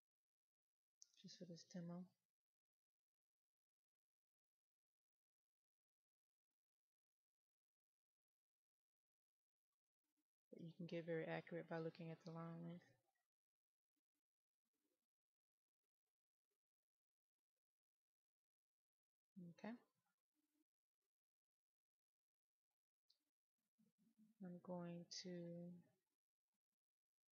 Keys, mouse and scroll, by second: 6.2 middle click, 8.1-18.1 drag, 22.8-23.4 scroll up 1, 23.4-24.2 scroll down 1, 24.2 click.